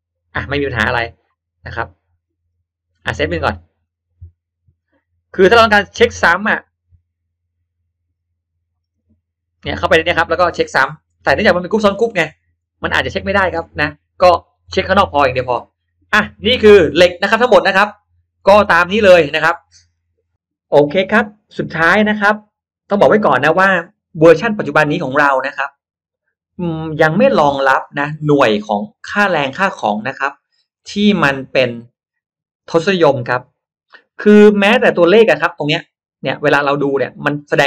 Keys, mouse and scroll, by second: 0.6 click, 1.6 click, 2.2 middle click, 3.8 click, 4.7 click, 8.7 click, 9.5 click, 10.1-10.5 drag, 10.7 middle click, 11.1-11.4 scroll up 1, 11.9 click, 12.5 scroll up 1, 12.7-13.5 scroll down 2, 13.9 Escape, 14.4 Escape, 14.8 middle click, 14.9 scroll down 1, 15.4-16.1 scroll up 1, 16.6-17.2 scroll up 1, 17.0 middle click, 17.4 scroll down 1, 17.7 scroll up 1, 17.8 middle click, 18.0-18.8 scroll down 1, 24.1 click, 27.4 shift+x, 27.9-29.2 shift+drag, 28.8 shift+x, 29.8-32.0 shift+drag, 30.8 shift+x, 34.2 shift+right click, 34.4 shift+right click, 37.4 click.